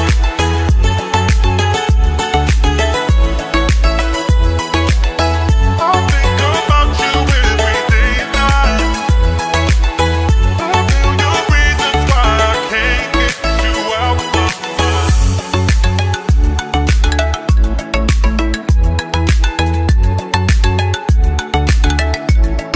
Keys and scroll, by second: 14.4 F3, 20.1 shift+F2, 21.3 Down, 22.6 F3.